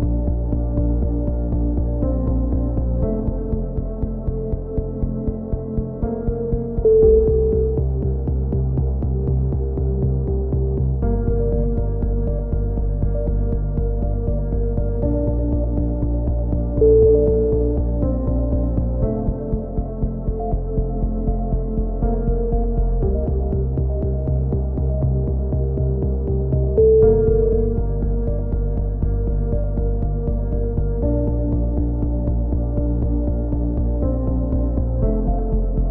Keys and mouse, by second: 0.2 c, 1.1 right click, 1.6 click, 4.0 a, 4.2 z, 4.6 middle click, 4.7 click, 5.8 click, 6.5 click, 7.2 ctrl+l, 7.8 n, 8.6-9.7 drag, 9.8-10.8 drag, 10.9 a, 11.6 ctrl+r, 12.8 z, 13.0 a, 14.1 click, 14.7-17.4 middle drag, 17.2 x, 18.2 z, 19.1 click, 21.1 KP_7, 21.6 n, 22.2 z, 22.5 click, 25.0 a, 25.4 z, 25.7 click, 26.9-28.2 middle drag, 27.8 KP_3, 28.2 z, 29.2 ctrl+r.